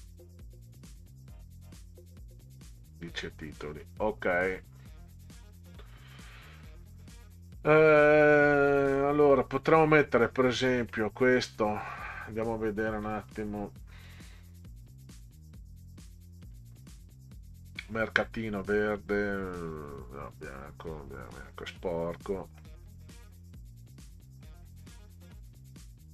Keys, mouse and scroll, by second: 1.7 click, 3.1 click, 4.1 scroll up 2, 5.6 middle click, 5.6 scroll up 2, 6.6 scroll down 2, 9.7 click, 9.9 click, 10.7-11.8 drag, 13.0 click, 14.0 click, 15.1 scroll down 2, 16.4 click, 23.1 click.